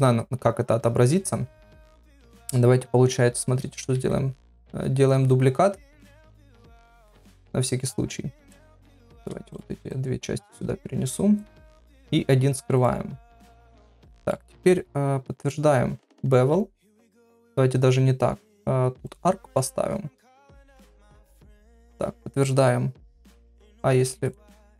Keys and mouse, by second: 3.1 KP_Divide, 4.0 shift+d, 7.8 click, 9.1 click, 9.5 shift+click, 9.9 click, 11.4 click, 12.7 click, 14.2 middle click, 16.4 ctrl+a, 17.5 ctrl+z, 18.5 click, 20.4 KP_Divide, 21.3 middle click, 23.7 click.